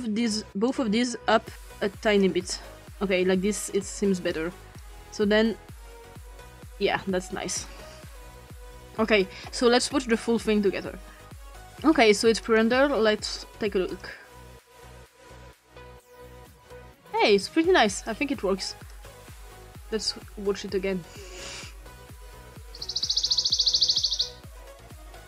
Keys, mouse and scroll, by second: 0.3-2.2 shift+drag, 2.8-3.8 drag, 4.2 click, 4.8-7.6 drag, 8.2-8.8 ctrl+scroll down 2, 8.9-9.5 ctrl+scroll down 2, 9.5-11.3 ctrl+scroll down 2, 11.6 click, 13.9 click, 17.9 click, 18.9 click, 21.4 click, 24.2 click, 25.0 click.